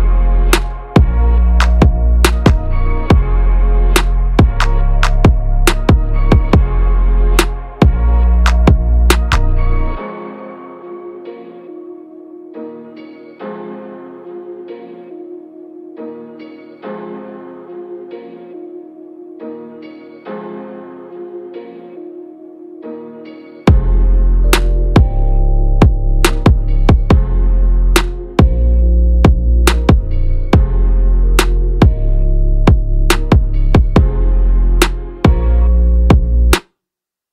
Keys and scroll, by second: 2.1 ctrl+=, 2.6 ctrl+space, 16.0 ctrl+a.